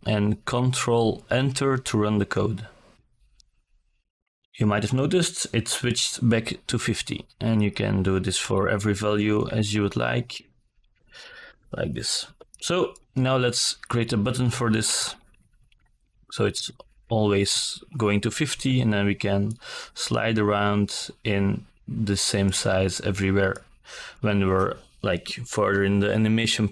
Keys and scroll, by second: 5.1 KP_1, 5.1 KP_2, 5.3 KP_0, 6.1 ctrl+a, 7.0 Return, 11.5 KP_5, 11.6 KP_0, 12.7 ctrl+a, 13.2 Return.